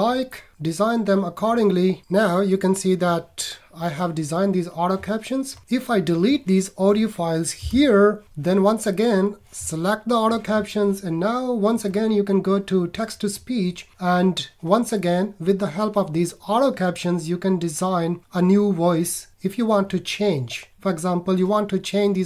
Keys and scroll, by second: 7.6 BackSpace.